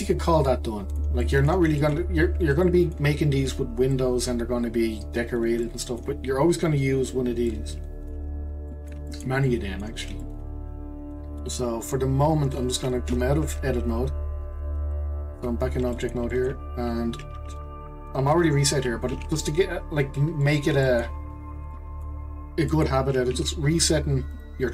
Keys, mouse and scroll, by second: 13.1 Tab, 15.9-19.1 middle drag, 19.1 q, 20.4-21.2 middle drag, 21.2-21.7 scroll up 1, 21.7-22.3 middle drag, 22.3-22.7 scroll down 2, 22.7 middle click, 23.4 q.